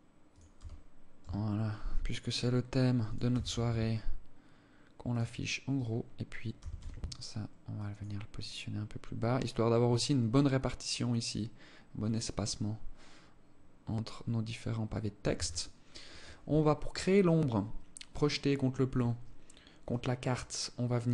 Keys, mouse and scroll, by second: 2.7 g, 5.2 right click, 5.9 g, 14.7 ctrl+s.